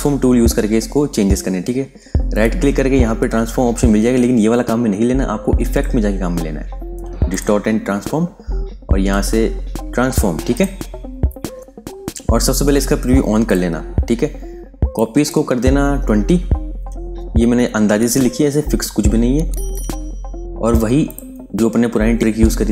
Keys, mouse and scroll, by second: 2.2 right click, 5.6 click, 10.4 click, 15.9 KP_2, 16.0 KP_0, 20.9 click, 22.1-22.7 scroll down 1.